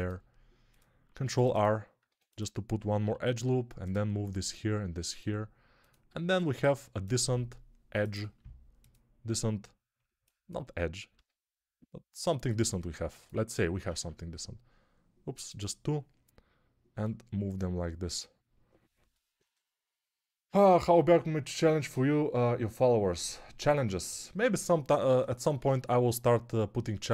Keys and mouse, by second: 1.1 ctrl+r, 1.9 1, 2.9 g, 4.4 g, 6.0 g, 8.1-11.0 middle drag, 8.1 g, 11.0-13.3 drag, 11.0 g, 13.3-27.1 ctrl+middle drag, 13.8 ctrl+r.